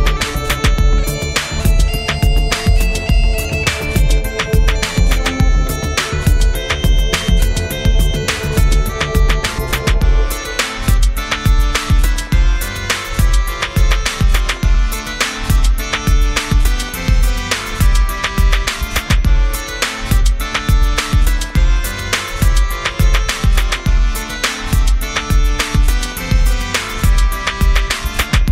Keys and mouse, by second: 0.2 right click, 0.3 click, 1.0 right click, 1.1 s, 2.0 s, 4.0 s, 4.4-5.6 drag, 5.5 g, 5.5 f, 6.1 middle click, 6.3-7.5 drag, 7.5 middle click, 8.2-10.6 drag, 10.6 right click, 10.8 middle click, 11.0-12.0 drag, 11.6-12.6 middle drag, 12.2-13.3 drag, 12.8-15.0 middle drag, 15.0 1, 15.0 f, 15.6-21.9 drag, 18.4-23.8 middle drag, 18.4 right click, 20.9-21.9 right drag, 22.0-25.0 drag, 22.0-23.8 right drag, 25.1-27.8 drag, 25.2-26.4 middle drag, 25.2-26.4 right drag, 27.8-28.5 middle drag.